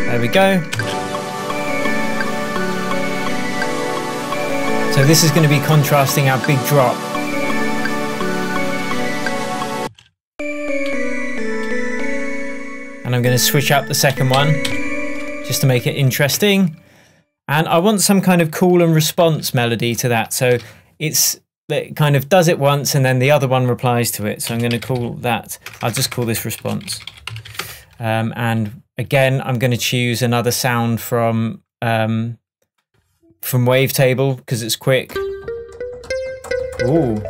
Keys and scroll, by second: 0.5 super+d, 1.7 space, 9.8 space, 14.1 Up, 16.4 shift+Tab, 19.3 shift+super+t, 20.6 super+r, 24.7 shift+a, 26.4-27.6 typing, 27.6 Return.